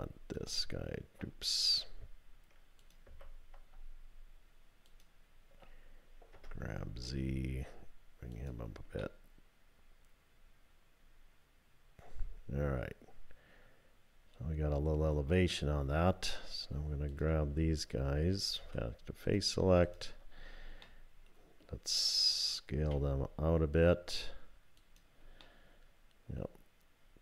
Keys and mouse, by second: 0.3 alt+click, 3.1 2, 4.9 alt+click, 6.4 g, 9.1-15.9 drag, 17.1 click, 18.6 3, 19.8 shift+click, 20.8 click, 22.8 s, 25.4-26.4 drag.